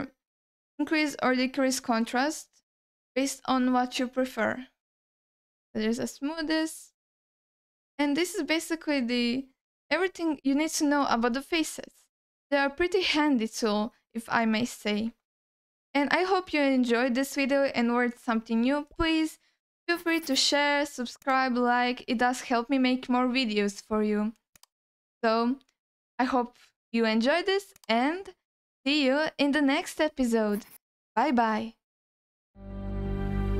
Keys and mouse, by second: 5.0 alt+middle click, 5.6-7.0 shift+drag, 7.3-8.5 shift+drag, 8.9-11.0 shift+drag, 11.5 ctrl+alt+middle click, 12.0-14.5 middle drag, 15.0 ctrl+alt+middle click, 15.3 middle click, 15.9 ctrl+alt+middle click.